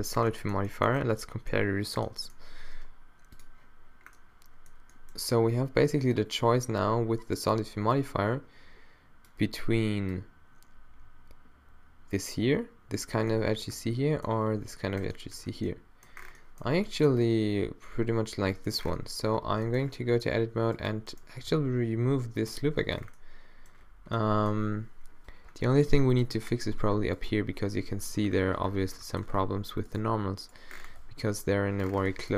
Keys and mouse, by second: 0.4-4.2 middle drag, 13.6-15.0 middle drag, 16.5 middle click, 16.9 middle click, 17.1 middle click, 18.4 middle click, 19.0 middle click, 19.4 Tab, 21.5 x, 22.8 Tab, 26.1 middle click, 26.9 Tab, 28.0 -, 29.9-31.4 right drag, 30.0 g, 31.4 alt+o, 31.9 middle click.